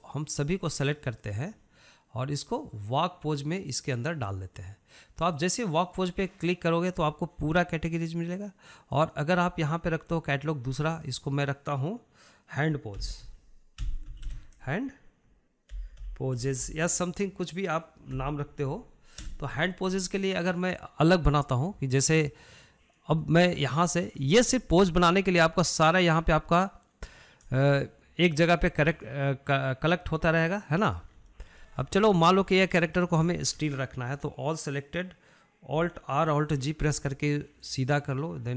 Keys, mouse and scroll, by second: 1.4 click, 3.8-5.5 drag, 6.6 click, 10.2 click, 12.1 click, 12.2-15.4 drag, 23.6 click, 24.5 middle click, 24.9-25.2 scroll down 1, 25.2-25.8 shift+middle drag, 25.8 scroll up 1, 25.9-28.9 shift+middle drag, 30.2-32.1 drag, 32.1 middle click, 32.4 scroll up 2, 32.6-33.8 shift+middle drag, 33.8-34.2 scroll down 1, 34.2 shift+middle drag, 34.5 scroll down 1, 34.7-37.6 shift+middle drag, 37.6 alt+r, 37.9 alt+g.